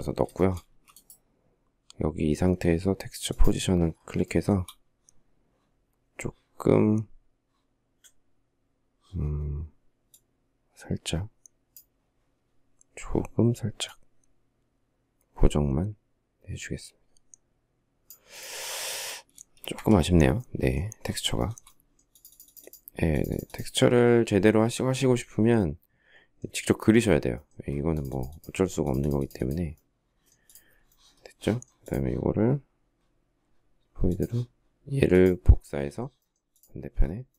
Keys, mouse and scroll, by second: 0.1 shift+middle click, 0.4 space, 4.0 shift+middle click, 19.1 space, 19.3 Escape, 19.5 Escape, 21.2 shift+middle click.